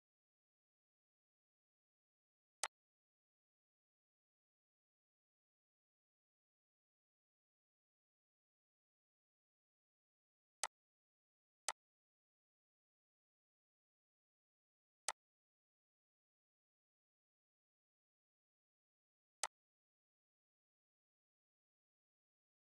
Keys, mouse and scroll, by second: 15.0-17.6 drag, 17.6 right click, 19.7 click.